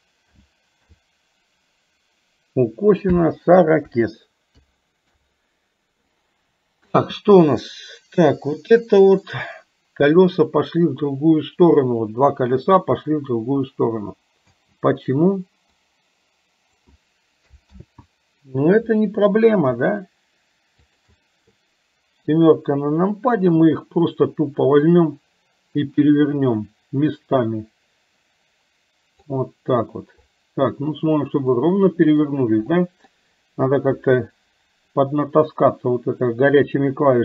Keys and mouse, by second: 7.0 space, 8.5 middle click, 14.5 space, 15.8-16.9 drag, 17.9 ctrl+z, 21.0 shift+click, 22.3 KP_7, 24.9-29.4 drag, 31.7 middle click, 32.8 middle click, 33.9 KP_3.